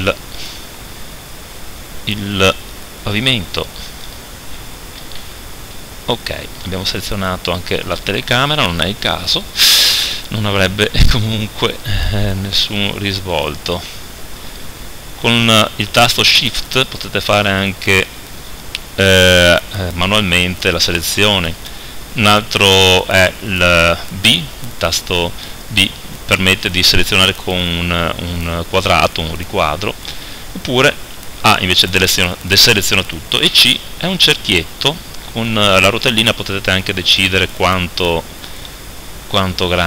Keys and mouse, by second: 0.8 click, 1.1-2.6 middle drag, 2.6 click, 3.6 right click, 5.0 z, 23.2 b, 30.3-31.8 right drag, 31.4 a, 33.5 c, 36.9 middle click.